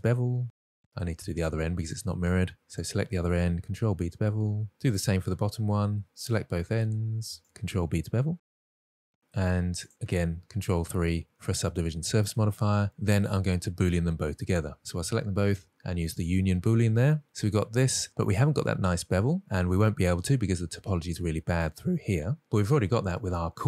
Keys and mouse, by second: 1.3-2.0 middle drag, 2.5 ctrl+z, 2.5 alt+a, 3.2 alt+click, 3.7 ctrl+b, 4.8 middle click, 5.2 Tab, 5.4 drag, 5.9 Tab, 6.4 alt+click, 6.7 middle click, 8.1 ctrl+b, 9.1 shift+click, 9.2 middle click, 9.5 Tab, 9.6 middle drag, 10.2 click, 11.1 ctrl+3, 12.0-12.4 middle drag, 12.8 click, 15.2 shift+click, 16.9 click, 18.5 middle click, 20.0 Tab, 22.4 Tab.